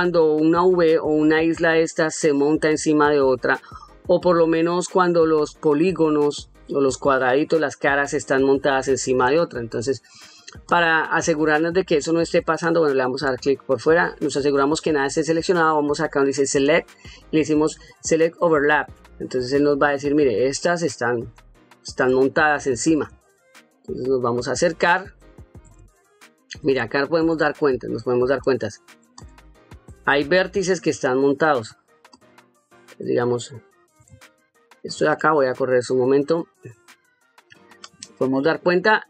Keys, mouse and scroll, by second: 0.5 middle click, 10.6 click, 11.5 ctrl+middle click, 12.6 click, 13.5 shift+middle click, 14.7 ctrl+shift+middle click, 16.5-18.9 drag, 22.2 shift+middle click, 23.1 ctrl+middle click, 24.0 ctrl+middle click, 25.0 shift+middle click, 25.9 ctrl+middle click, 26.8 shift+middle click, 27.6-30.0 ctrl+middle drag, 30.9 ctrl+middle click, 32.1 click, 33.3 shift+middle click, 34.2 ctrl+middle click, 36.2 click.